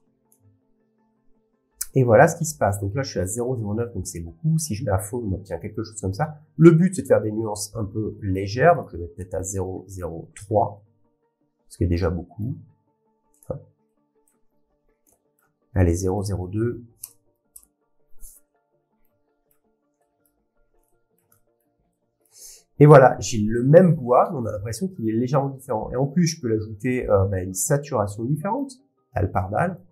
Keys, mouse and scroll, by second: 0.3 click, 4.1 click, 8.3 click, 11.6 click, 13.4 click, 14.3 click, 15.4-19.2 shift+middle click, 15.4 scroll down 6, 16.2 click, 17.6 BackSpace, 19.4 scroll, 19.5 click, 20.2 middle click, 21.6 middle click, 22.2-29.9 middle click, 28.5 click, 29.7 click.